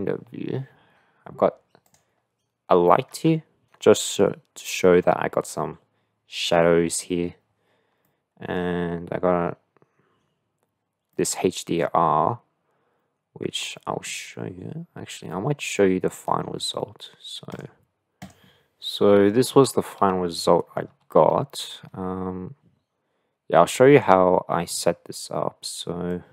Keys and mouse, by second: 1.8-2.3 drag, 8.5 middle click, 11.4-14.1 middle drag, 17.7 click, 21.0 shift+middle click, 26.1 click.